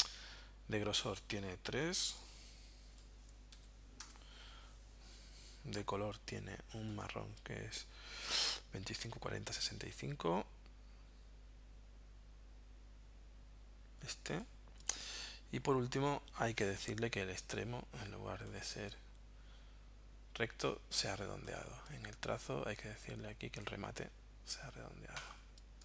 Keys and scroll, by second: 3.6 3, 4.0 Return.